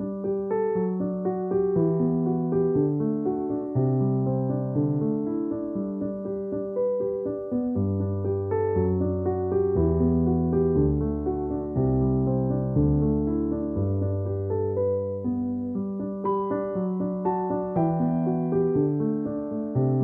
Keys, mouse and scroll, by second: 0.3 ctrl+z, 0.8 alt+click, 3.1 ctrl+-, 4.0 ctrl+=, 4.2-5.0 typing, 5.2 alt+click, 7.2 alt+click, 9.0 alt+click, 10.7 space, 10.8 click, 11.0 space, 12.1 alt+click, 13.5 alt+click, 15.4 alt+click, 16.5 alt+click, 18.0 alt+click, 19.2 ctrl+-.